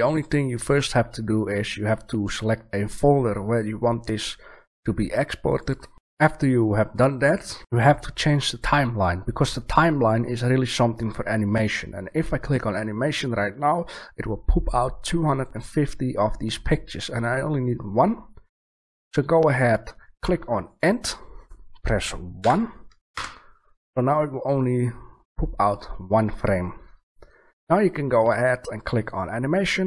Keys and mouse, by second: 5.5 click, 20.6 click, 29.8 click.